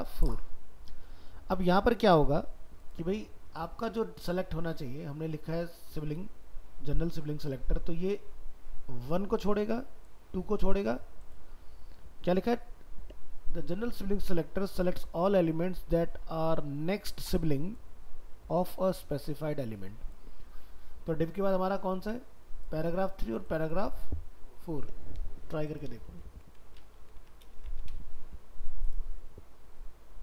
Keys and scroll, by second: 26.3 ctrl+s, 26.8 alt+f, 27.5 ctrl+c.